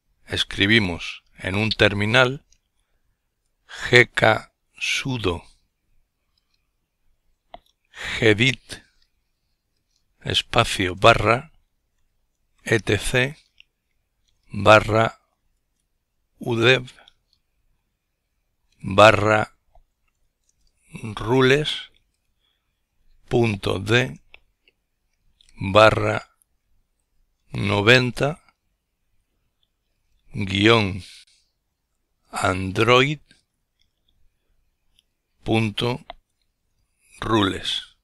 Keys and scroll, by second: 0.0-1.3 typing, 2.7-4.8 typing, 6.5-8.2 typing, 9.9-12.1 typing, 14.3-16.8 typing, 18.9-19.4 typing, 21.1 typing, 23.0-23.4 typing, 26.3-29.8 typing, 31.0-33.2 typing, 37.2 Return.